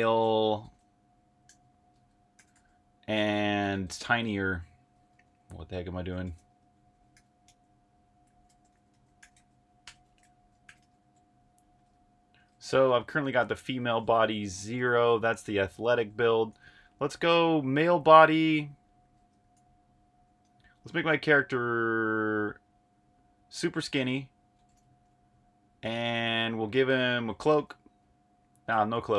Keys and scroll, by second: 0.0-7.1 typing, 1.9 Return, 8.2-14.4 typing, 15.8-16.8 typing, 18.0-19.4 typing, 24.3-29.1 typing.